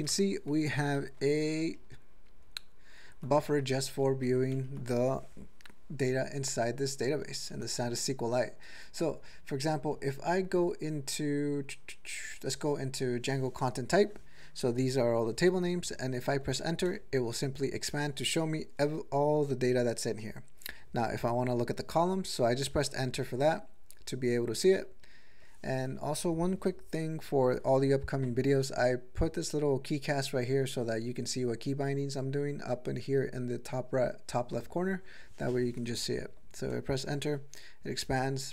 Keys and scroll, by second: 1.2 ctrl+=, 2.3 ctrl+-, 3.9 ctrl+g, 4.3 ctrl+a, 4.5 ctrl+e, 5.7-7.3 Left, 7.3 ctrl+a, 8.9 Down, 9.9 Down, 10.1 Down, 10.3 Down, 10.5 Down, 12.1 Down, 12.3 Down, 12.9 Down, 16.9 Return, 22.4 Return, 22.9 Return, 23.4 Return, 23.8 Return, 24.3 Return, 24.7 Return, 25.3 Return, 36.7 Return, 37.4 Return, 38.0 Return.